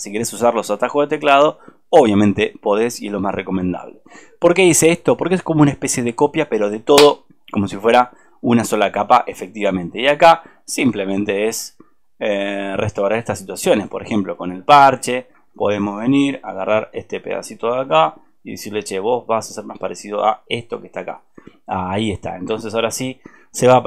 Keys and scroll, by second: 15.5 alt+space, 22.5 alt+space.